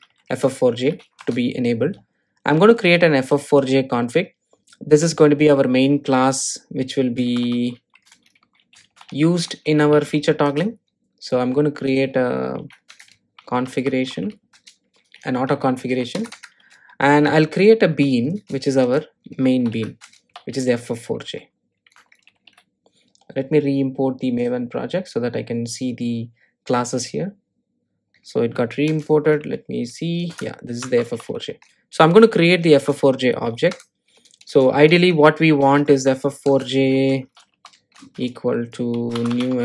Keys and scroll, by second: 14.8 Return, 24.8 shift+super+i, 30.7 Return, 36.8 Return.